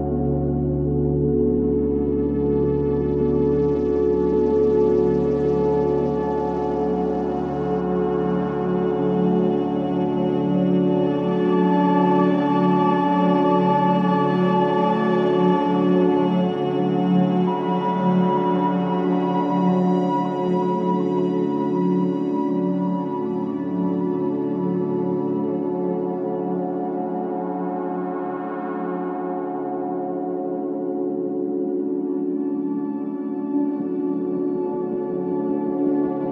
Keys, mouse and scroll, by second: 3.5 alt+middle click, 5.7 click, 12.6 click, 14.9 ctrl+z, 15.9 click, 16.7 ctrl+z, 17.5 ctrl+z, 18.9 click, 19.6 ctrl+z, 20.8 click, 22.8 ctrl+z, 23.6 click, 24.3 ctrl+z, 25.3 click, 31.1 click, 32.7-33.1 scroll up 1, 33.3-33.7 alt+scroll up 1, 33.7 alt+middle click, 33.9 scroll up 1, 35.5 click.